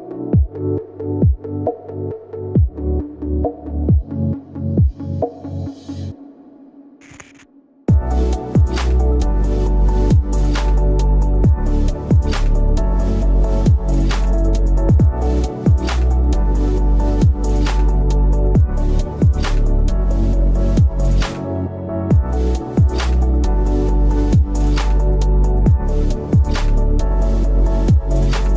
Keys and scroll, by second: 0.5 v, 1.7 shift+m, 2.0 v, 3.6 v, 5.0 v, 6.7 v, 7.9 Return, 8.7 m, 9.9 v, 12.9 Return, 14.1 p, 16.3-17.4 typing, 18.8 p, 19.9 v, 20.4 ctrl+z, 21.6 p, 23.3 ctrl+z, 24.5 ctrl+z, 27.0 v, 27.2 a, 28.4 v.